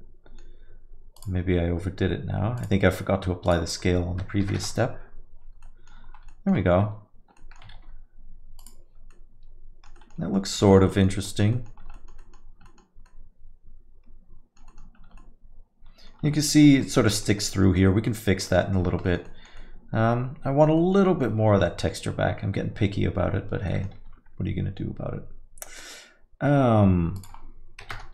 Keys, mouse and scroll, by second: 0.1 alt+middle click, 1.1 click, 2.5 click, 5.0 click, 5.9 alt+middle click, 6.0 scroll up 3, 6.3 alt+middle click, 7.0 shift+z, 7.3 alt+middle click, 7.7 shift+z, 8.8 click, 9.1 alt+middle click, 9.9 middle click, 10.4 scroll up 2, 10.6 alt+middle click, 10.9 middle click, 11.2 alt+middle click, 11.5 middle click, 11.7 scroll down 2, 11.9 alt+middle click, 12.2 middle click, 12.4 scroll down 2, 12.6 alt+middle click, 13.0 alt+middle click, 14.7 middle click, 14.9-15.3 scroll up 3, 15.3 alt+middle click, 16.3-17.1 scroll up 4, 16.6 alt+middle click, 17.2 alt+middle click, 17.6 middle click, 17.8 alt+middle click, 18.5-19.0 scroll down 9, 19.0 alt+middle click, 19.2 middle click, 19.6 alt+middle click, 20.8 middle click, 21.0 alt+middle click, 21.6 alt+middle click, 23.7 middle click, 24.6 ctrl+s, 27.1 click.